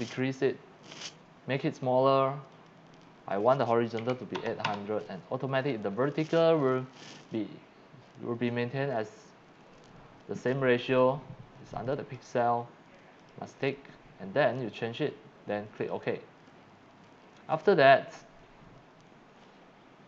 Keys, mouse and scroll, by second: 2.5 click, 3.0 click, 4.0 KP_8, 4.3 KP_0, 4.6 KP_0, 5.1 click, 6.3 click, 11.8 click, 13.2 click, 13.5 click, 15.8 click.